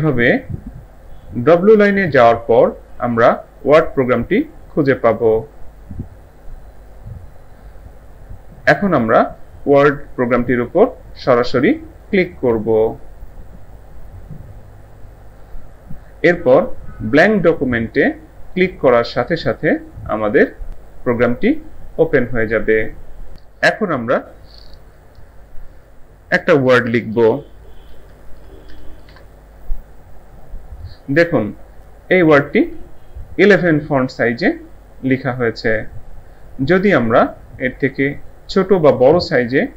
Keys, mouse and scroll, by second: 12.0 click, 19.1 click, 27.7-29.1 typing.